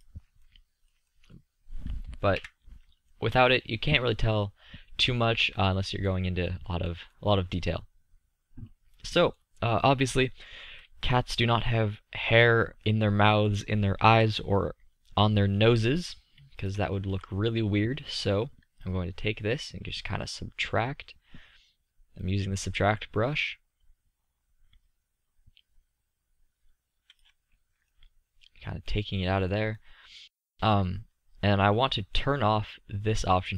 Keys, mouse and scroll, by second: 2.1 KP_3, 12.8-15.6 middle drag, 16.8 z, 17.5-18.1 drag, 20.5-23.4 middle drag, 25.1-28.3 middle drag, 33.2-33.5 middle drag.